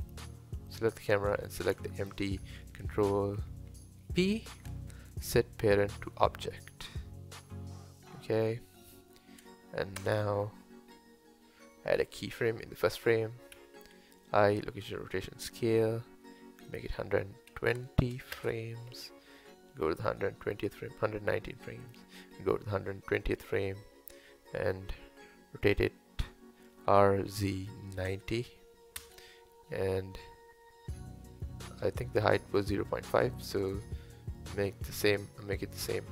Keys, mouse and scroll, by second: 0.0 click, 0.7 click, 1.5-2.0 middle drag, 2.0 shift+click, 4.0 ctrl+p, 5.9-8.1 middle drag, 8.1-9.4 scroll down 1, 10.0 KP_0, 13.6 i, 16.8-22.0 drag, 26.8 r, 31.9 click, 33.4 click.